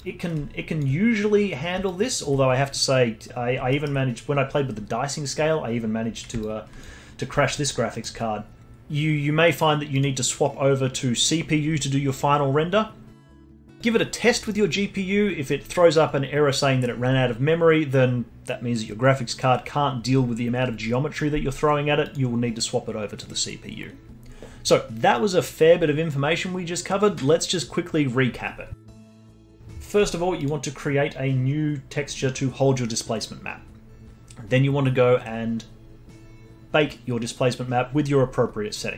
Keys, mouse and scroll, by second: 0.0-2.0 alt+drag, 2.1-3.2 drag, 3.2 scroll up 1, 3.7 alt+middle click, 4.1 scroll up 2, 6.0 scroll down 1, 6.4-8.0 alt+drag, 8.0-10.8 alt+middle drag, 10.8 click, 13.8-14.5 drag, 22.0-24.6 drag, 28.9 middle click, 29.8-30.4 scroll down 1, 30.4 click, 35.6-36.2 scroll down 4, 36.3-37.1 scroll down 3.